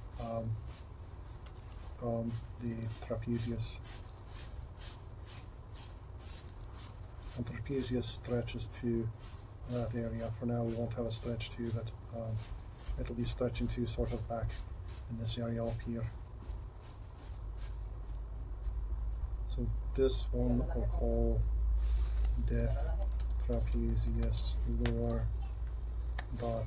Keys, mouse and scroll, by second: 1.5 shift+d, 2.9 r, 4.2 r, 6.5 g, 8.1 r, 9.5 r, 10.0 g, 11.7 r, 17.2 g, 24.5-26.6 shift+drag.